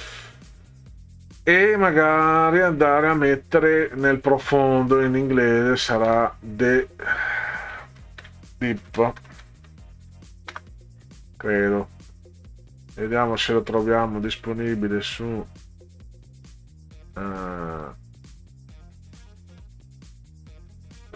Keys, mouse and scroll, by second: 0.3-1.4 drag, 2.2 click, 2.9-3.9 drag, 5.4 click, 6.1 space, 7.8-10.6 typing, 13.0 click, 15.5 click, 16.7-17.2 scroll down 4, 17.8-18.4 scroll down 4, 20.0-20.5 scroll down 4.